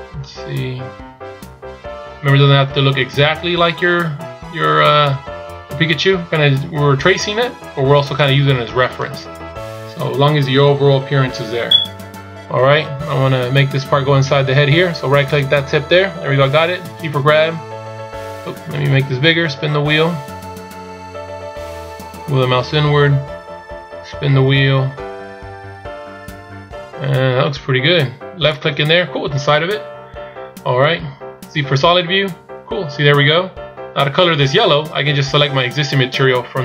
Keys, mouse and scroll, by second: 10.2-10.7 scroll down 2, 15.4 right click, 17.6 g, 31.7 z.